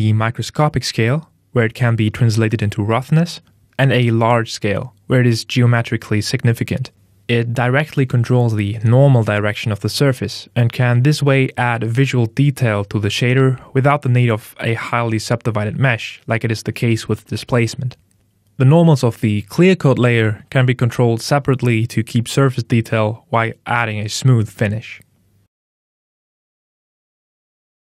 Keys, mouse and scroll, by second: 2.6 click, 4.1 KP_Enter, 5.7 KP_Enter, 18.1 click, 24.8 click.